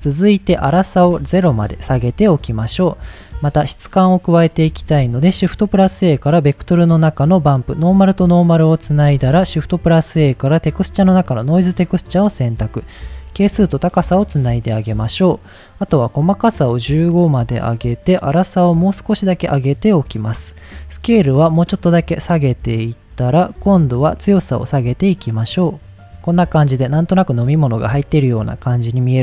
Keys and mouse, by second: 0.8-2.6 drag, 4.1 middle click, 4.7 shift+a, 7.6-8.2 drag, 8.5 middle click, 8.9 shift+a, 11.9-12.9 drag, 13.5-14.7 drag, 15.1 click, 16.0 click, 17.0 middle click, 18.5-19.6 drag, 21.2-23.2 drag, 24.3-26.1 drag, 26.1 ctrl+s, 26.3 middle click, 26.9-27.3 middle drag, 27.7 middle click, 28.5 middle click, 29.1 middle click.